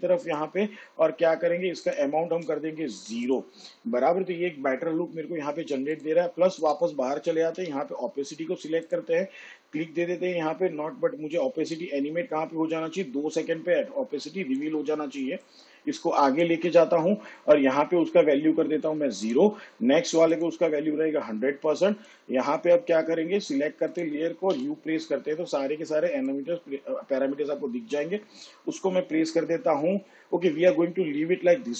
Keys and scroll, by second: 3.2 0, 8.4 t, 25.4 u.